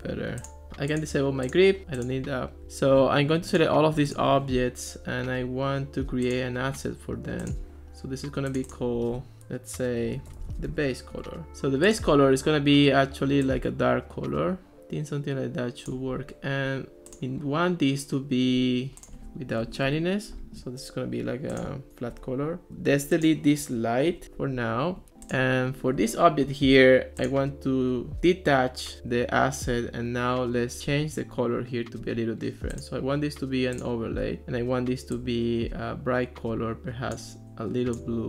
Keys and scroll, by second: 10.1-11.2 typing, 19.6 0, 19.9 Return, 24.1 BackSpace.